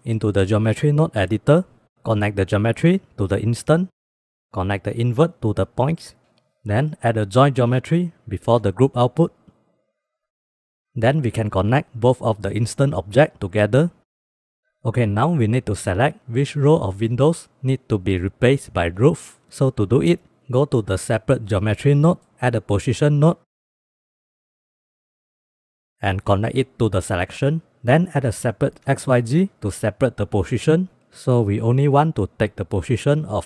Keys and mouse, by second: 1.8 click, 2.1-4.0 drag, 4.2 click, 4.6-5.9 drag, 6.7 shift+a, 8.7-9.2 drag, 10.1 click, 10.5 middle drag, 11.7-12.7 drag, 14.1 middle click, 14.2 click, 19.6-19.9 drag, 20.5 drag, 21.1 click, 22.9 shift+a, 26.6-27.5 drag, 28.0 shift+a, 33.1-33.4 drag.